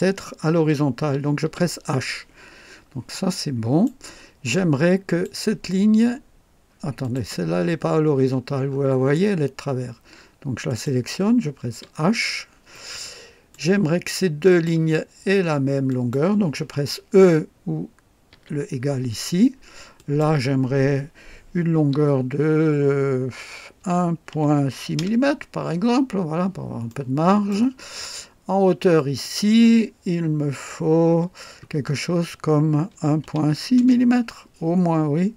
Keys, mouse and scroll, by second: 0.6-1.4 typing, 3.0-3.7 typing, 3.1-4.0 right drag, 5.0 click, 7.0 click, 8.6-9.3 typing, 8.6 scroll up 1, 10.7 click, 11.7 typing, 12.1 scroll down 1, 12.7-13.7 right drag, 14.5 click, 15.9 click, 16.0-16.8 typing, 18.3 typing, 19.9 click, 21.8 typing, 23.8-25.5 typing, 24.9 Return, 25.9-26.3 scroll down 2, 26.9-27.7 right drag, 27.1-27.9 typing, 28.9 click, 31.1-34.4 typing, 34.8-35.2 scroll down 2.